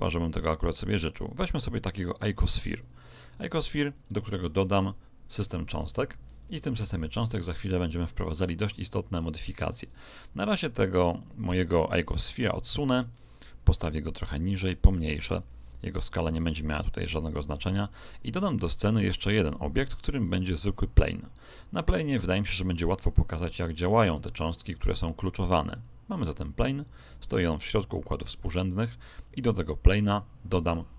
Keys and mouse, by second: 5.3-8.1 drag, 11.1 click, 14.4 s, 19.9 shift+a, 26.5-30.9 middle drag.